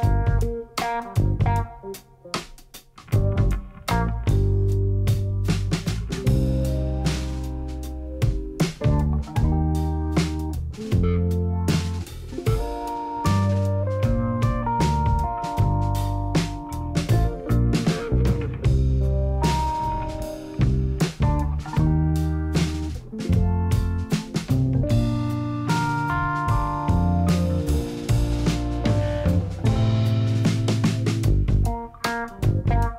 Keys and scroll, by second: 9.6 7, 11.6 g, 13.9 g, 16.0 g, 17.9 Tab, 18.3 a, 21.3 Tab, 21.8 alt+a, 25.4 x, 28.4 q.